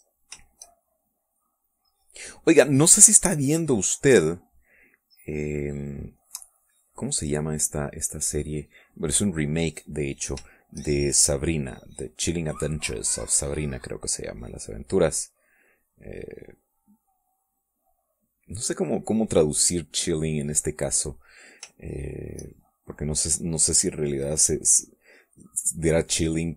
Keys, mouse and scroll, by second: 0.1-7.0 drag, 7.2 middle click, 7.9-9.3 middle drag, 9.4 middle click, 10.7 shift+click, 11.1-17.9 shift+drag, 18.2 middle click, 19.0-20.0 middle drag, 20.3 middle click, 22.4 shift+click, 23.2-26.5 shift+drag.